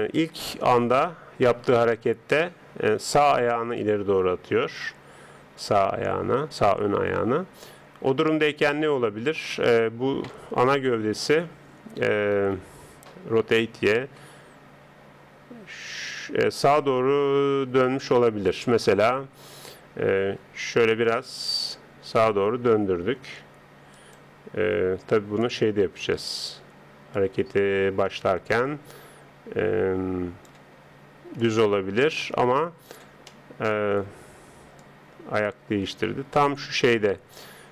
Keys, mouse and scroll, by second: 1.9 click, 11.1 r, 13.4 r, 19.1 KP_1, 20.5 r, 25.5 click, 31.4 click, 33.3-34.8 middle drag, 34.8 click.